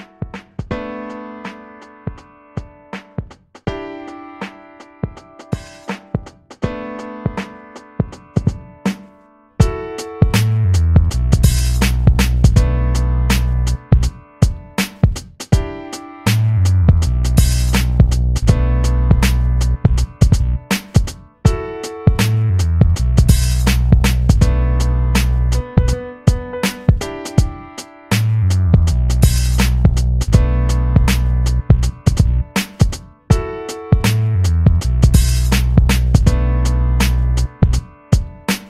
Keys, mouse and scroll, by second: 2.5 shift+a, 7.0-11.9 drag, 11.9 s, 14.7 KP_1, 15.7 s, 22.5 ctrl+a, 24.5 Tab, 25.7 click, 27.1 click, 28.1 b, 32.9 b, 38.2 e.